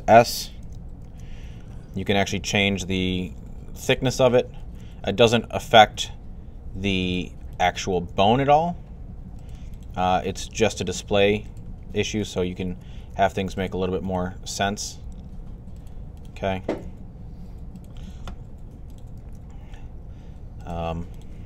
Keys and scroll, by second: 0.8 ctrl+alt+s, 2.7 ctrl+alt+s, 4.4 ctrl+alt+s, 7.7 ctrl+alt+s, 9.8 ctrl+alt+s, 12.4 alt+s, 14.5 ctrl+alt+s, 16.4 ctrl+alt+s, 19.0 ctrl+alt+s.